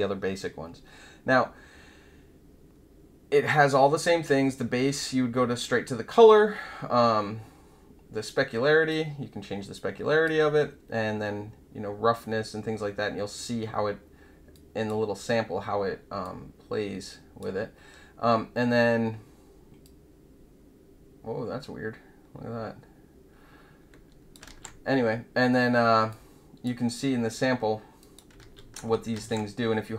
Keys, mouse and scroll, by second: 8.8-10.2 drag, 14.5-14.8 drag, 16.2-17.3 drag, 19.8-24.3 drag, 24.4 ctrl+z, 26.0-26.6 drag, 27.9 click, 28.3 ctrl+z, 29.1 ctrl+z.